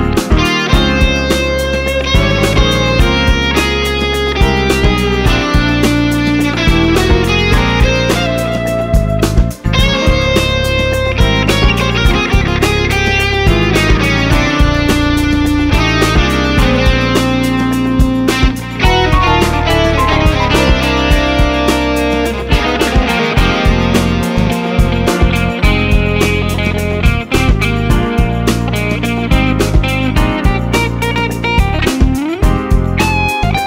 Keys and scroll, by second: 28.5 ctrl+s, 30.2 ctrl+s.